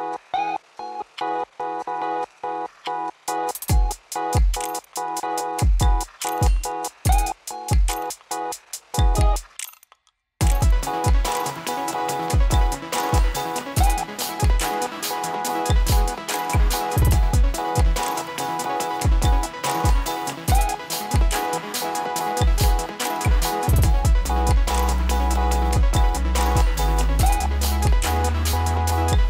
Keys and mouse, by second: 0.0-1.5 typing, 2.8-9.7 drag, 17.3 click, 20.7-23.5 drag.